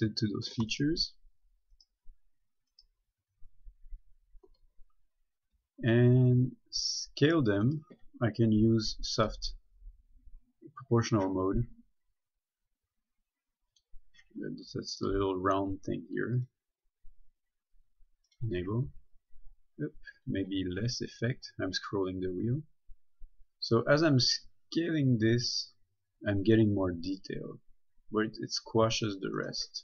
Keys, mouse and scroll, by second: 0.9 shift+right click, 5.9 s, 8.0 right click, 9.5 click, 14.0 click, 15.2 middle click, 16.6 click, 19.1 s, 20.1-20.4 scroll up 1, 22.0-24.1 scroll down 1, 29.6 right click.